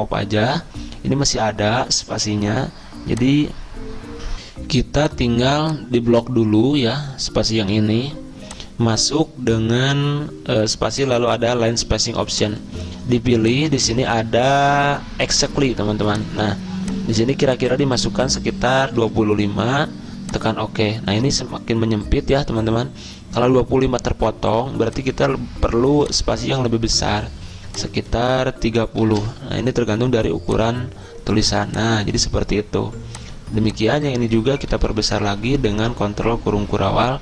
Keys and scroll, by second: 4.5 F10, 18.7-19.6 typing, 21.2-21.9 typing, 28.9-29.8 typing, 34.8 ctrl+], 35.0 ctrl+], 35.1 ctrl+].